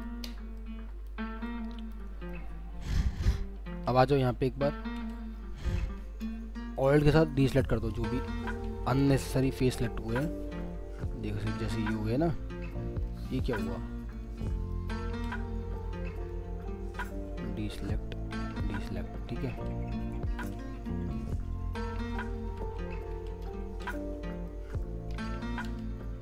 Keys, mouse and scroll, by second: 0.6 ctrl+click, 2.3 middle click, 3.7 alt+w, 5.3 scroll, 5.3 scroll down 1, 6.7 alt+click, 9.2 alt+w, 10.1 alt+middle click, 11.7 alt+scroll down 2, 12.2 alt+middle click, 13.5 alt+middle click, 15.0 ctrl+z, 15.8 alt+middle click, 16.9 alt+click, 18.1 alt+click, 18.9 alt+middle click, 19.5 alt+w, 21.1 alt+click, 23.0 alt+w, 23.1 alt+w, 23.6 ctrl+z, 24.5 alt+middle click, 25.1 alt+w, 25.6 alt+w, 25.9 scroll down 1.